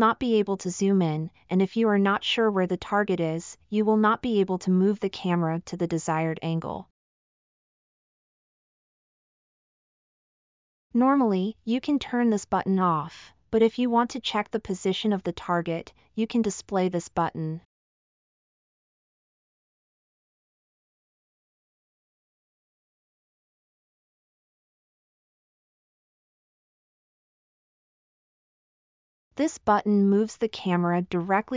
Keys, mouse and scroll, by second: 2.2 middle click, 2.2 scroll, 9.4 scroll, 9.9-10.3 scroll, 13.8-14.4 middle drag, 16.4-16.8 middle drag, 22.7-23.8 drag, 23.8-24.7 middle drag, 28.8 click.